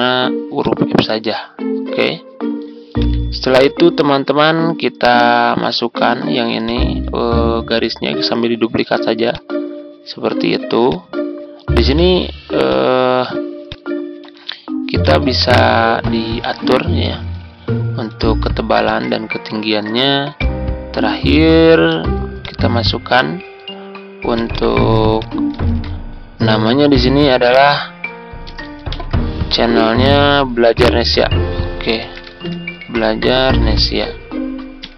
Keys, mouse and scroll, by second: 3.3-3.6 ctrl+scroll down 1, 4.9 click, 6.1 ctrl+d, 6.6-11.9 drag, 14.1-15.0 ctrl+scroll up 1, 15.0-17.3 drag, 18.7 click, 21.8 ctrl+d, 22.3-24.3 drag, 25.6 ctrl+a, 26.9-28.4 typing, 30.9-34.9 typing.